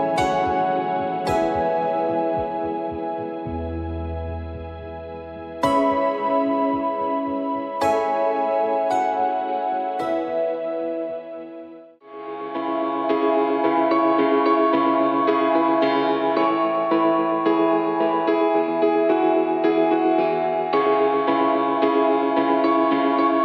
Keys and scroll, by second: 1.1 ctrl+j, 2.4 ctrl+j, 6.0 ctrl+g, 6.4 ctrl+a, 7.6 ctrl+d, 8.5-12.2 typing, 14.2 m, 16.9 m, 19.9 Return, 20.1 BackSpace, 20.4 BackSpace, 21.2 ctrl+d.